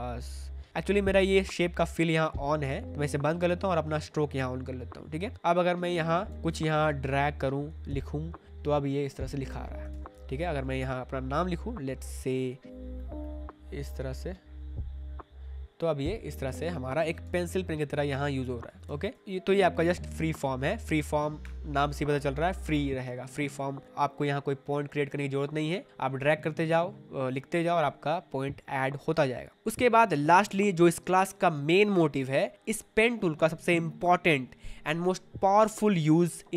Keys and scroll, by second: 6.2 2, 6.3 ctrl+z, 7.8 ctrl+z, 9.4 shift+z, 10.9 ctrl+z, 12.1 p, 12.7 ctrl+z, 17.2 v, 18.8 ctrl+z.